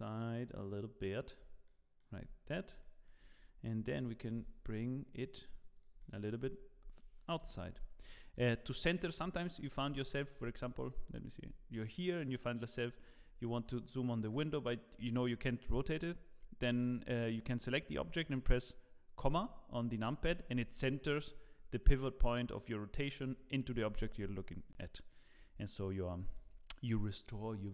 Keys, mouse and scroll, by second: 1.6 middle click, 2.2 Tab, 2.4-2.8 scroll up 4, 2.8 shift+middle click, 3.8 g, 6.0 middle click, 6.6-6.9 scroll down 8, 7.4 scroll down 1, 7.4 KP_Decimal, 8.3 middle click, 8.9 scroll down 1, 9.3 shift+middle click, 10.3 shift+middle click, 10.4 middle click, 11.2-11.9 scroll down 8, 11.7 middle click, 13.1-13.6 scroll up 9, 13.6 middle click, 14.4 scroll up 1, 15.5 middle click, 16.1 scroll down 1, 16.4-17.3 scroll down 6, 16.8 middle click, 19.2 KP_Decimal, 21.8 middle click, 24.3-24.9 scroll up 3, 24.9 middle click, 25.3-25.6 scroll down 4, 25.6 middle click, 26.5 scroll up 2, 27.0 middle click, 27.4 shift+middle click.